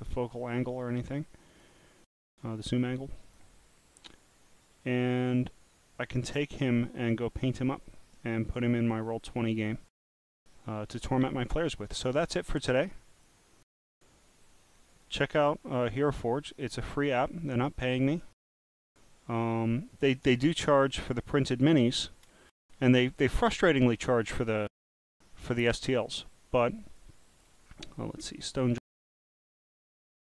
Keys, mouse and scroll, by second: 1.5 click, 3.2 click, 13.1 click, 14.9 click, 18.5 click, 21.6 click, 27.0 click, 28.8-30.3 typing.